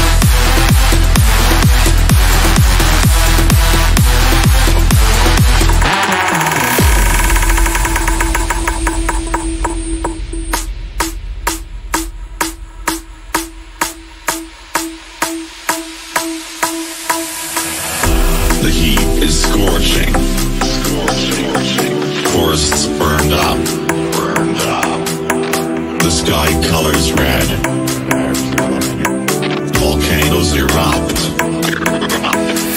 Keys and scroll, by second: 2.1 shift+Page_Up, 21.1 c.